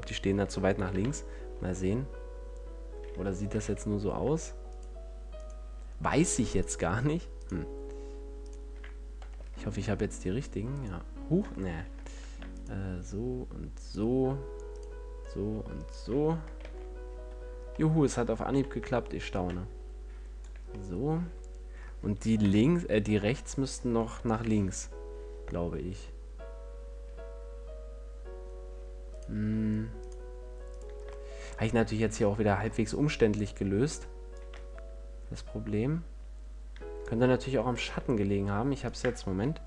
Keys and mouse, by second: 0.0 F11, 1.0 KP_1, 1.2 KP_5, 1.8 Tab, 3.8 z, 7.3-11.0 drag, 9.6 ctrl+l, 12.1 ctrl+z, 16.9 ctrl+l, 18.8 z, 19.6-22.7 drag, 22.7 KP_1, 24.6 KP_5, 32.6-33.6 drag, 34.6-36.4 middle drag, 36.4 click, 38.0-39.6 drag.